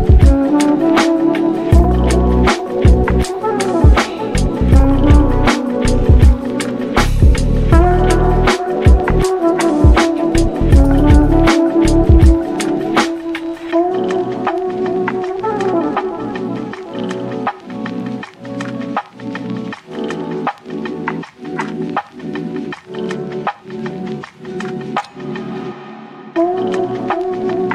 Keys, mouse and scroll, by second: 2.0 Tab, 2.2 ctrl+a, 3.0-4.4 drag, 4.8-6.8 shift+drag, 7.4 Tab, 9.1 ctrl+r, 10.3 click, 10.9 g, 13.4 click, 14.5 click, 14.9 ctrl+z, 15.1 ctrl+z, 15.7 shift+click, 16.5 g, 20.0 click, 23.1 g, 25.3 click, 25.8 g, 27.5 click.